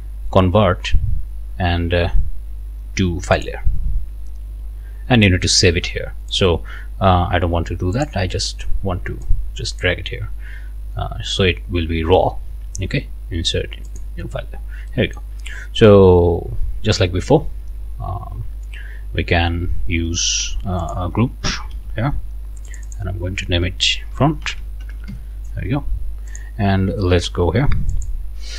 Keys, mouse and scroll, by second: 3.4 click, 6.3 click, 8.0 click, 9.3 click, 13.9 click, 15.0 click, 20.8 click, 21.7 ctrl+g, 22.7 click, 24.1-25.4 typing, 26.3 click, 27.9 click.